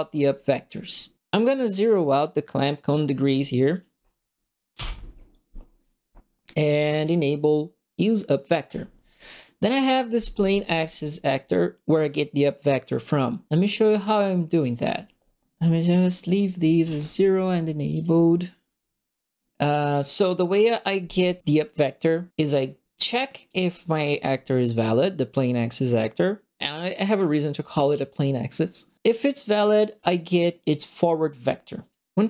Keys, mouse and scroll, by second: 3.7 click, 4.7 KP_0, 8.6 click, 14.5 click, 16.0 click, 16.7 KP_0, 17.9 click, 23.0 click, 28.8 right click, 31.8 click.